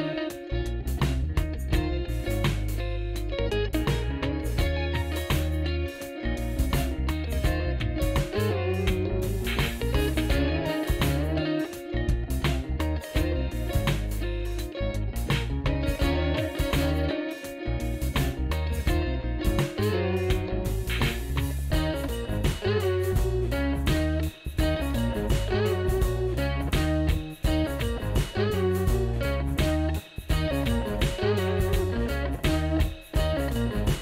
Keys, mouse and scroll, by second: 10.0 F4, 20.5 F4.